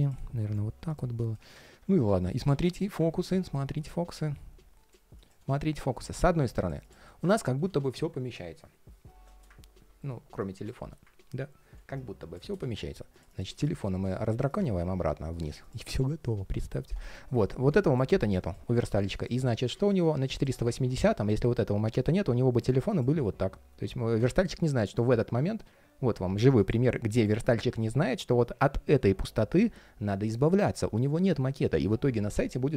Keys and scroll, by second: 0.1 super+], 3.2 ctrl+shift+4, 7.2 ctrl+shift+4, 20.4 super+z.